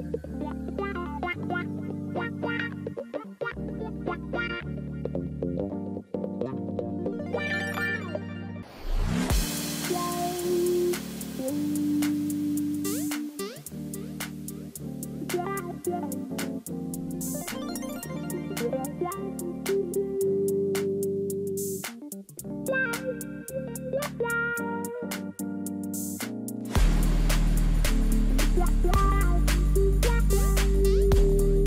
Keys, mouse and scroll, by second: 5.6 ctrl+t, 7.7 ctrl+z, 8.2 ctrl+z, 10.9 shift+click, 13.9 ctrl+s, 25.0 ctrl+j.